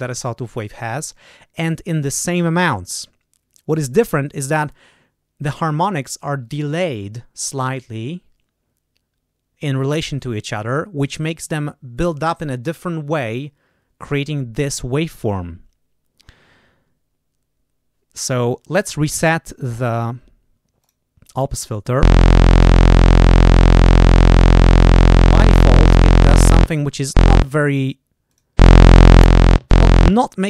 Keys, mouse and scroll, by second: 20.7 click, 28.2 click, 29.1 click.